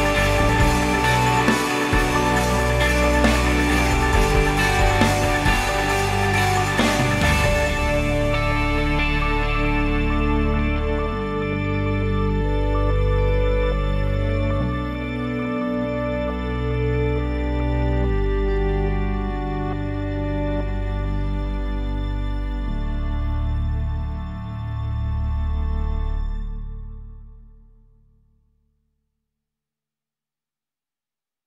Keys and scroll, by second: 20.7 5, 21.0 Return.